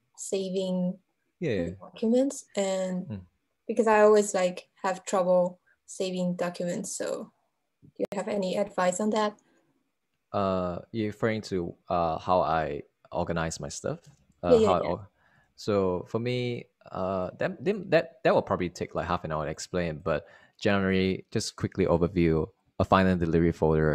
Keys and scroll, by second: 12.5 super+Right, 15.2 shift+super+-, 15.3-16.3 typing, 16.5 Return.